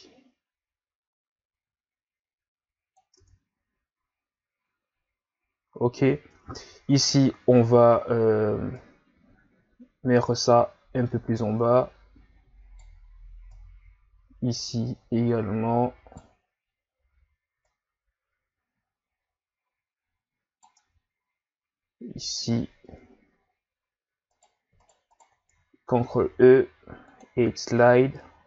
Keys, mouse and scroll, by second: 3.2 Tab, 5.3-5.9 ctrl+scroll up 3, 6.3 Tab, 7.0-7.6 scroll down 5, 8.7 right click, 13.5 right click, 17.6 right click, 20.9 Tab, 22.9 Tab, 24.3 right click, 24.8 shift+right click, 25.1 shift+right click, 26.0 ctrl+e.